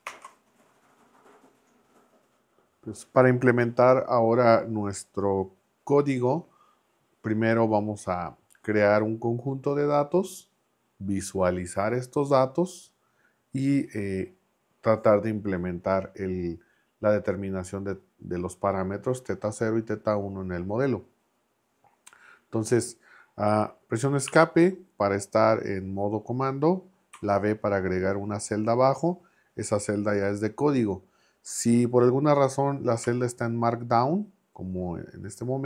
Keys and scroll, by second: 0.0 ctrl+Return, 24.3 Escape, 27.1 b, 33.0 m.